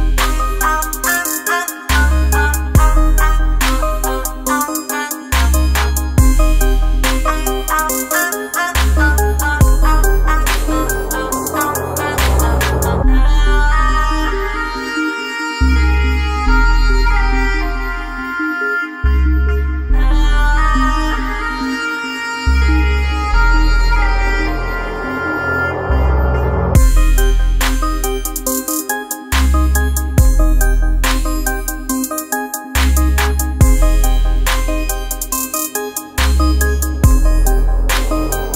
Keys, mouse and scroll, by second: 2.5 ctrl+space, 2.8 ctrl+click, 3.0 ctrl+space, 4.5-8.0 drag, 10.0 alt+scroll down 1, 10.5 space, 10.5 click, 10.9 space, 11.4-13.3 ctrl+drag, 13.3 ctrl+space, 13.5 ctrl+click, 13.8 ctrl+space, 16.4 F7, 17.2 space, 17.3 click, 17.8 space, 19.4-36.4 drag, 36.7 right click, 37.9 click.